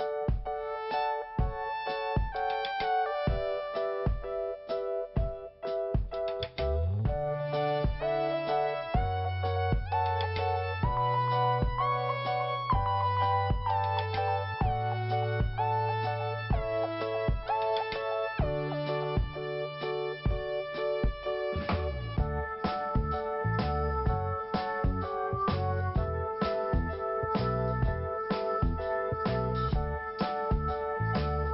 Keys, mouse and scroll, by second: 0.1 click, 2.6 click, 3.0 click, 6.0 click, 6.9 click, 9.8 click, 10.6 click, 12.7 click, 13.4 click, 14.1 click, 15.7 click, 16.4 click, 18.4 click, 20.5 click, 22.0 click, 23.9 click, 25.5 click, 26.7 click, 27.7 click, 29.1 click, 29.9 click, 31.4 scroll down 1.